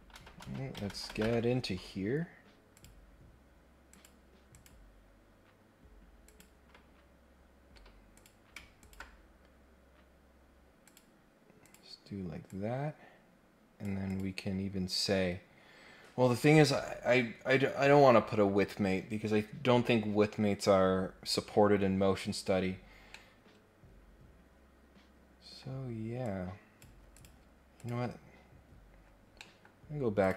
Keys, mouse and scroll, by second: 0.1 ctrl+Tab, 0.4 ctrl+Tab, 2.7 click, 3.8 click, 4.5 click, 6.2 click, 6.9 scroll down 1, 7.2-7.6 scroll up 2, 8.1 click, 8.8 ctrl+click, 10.8 click, 11.6 click, 12.4-13.8 drag, 14.0 click, 22.9 scroll down 1, 23.1-25.6 middle drag, 26.2 click, 27.1 click, 27.8 click, 28.7 scroll up 1, 29.0-29.3 scroll down 2, 29.3 middle click, 29.8 scroll up 1, 30.2 click.